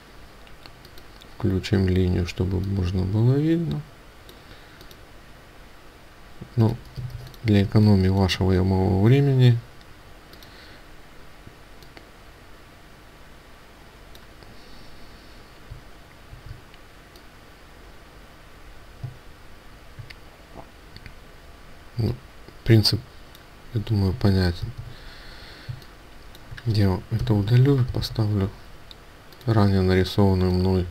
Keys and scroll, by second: 24.7 ctrl+z, 27.1 Delete, 27.8 ctrl+v.